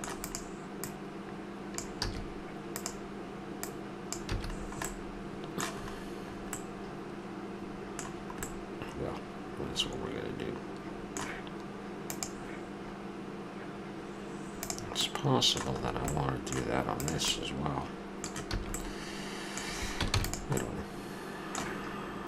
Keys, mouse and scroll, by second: 0.2-0.8 right drag, 0.8-1.8 middle drag, 1.8-2.4 drag, 2.1 a, 2.4-2.8 middle drag, 2.8-4.8 drag, 4.3 a, 4.8-6.9 middle drag, 8.8-10.3 middle drag, 15.0-15.8 middle drag, 15.9-17.0 middle drag, 17.0-17.4 right drag, 17.9-18.9 middle drag, 18.6 a, 19.2 middle click, 20.1 ctrl+s.